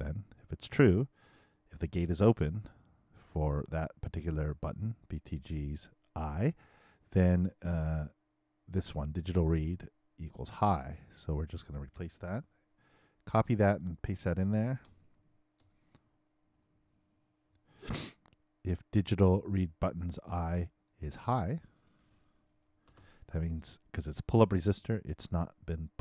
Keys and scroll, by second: 12.3 super+c, 17.5 super+v, 22.3-23.4 typing.